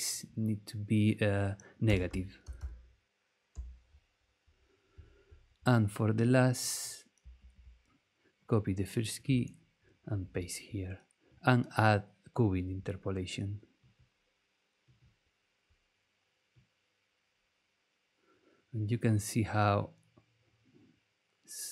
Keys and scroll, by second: 1.6-2.9 typing, 3.5 Return, 7.4 super+c, 10.0 super+v.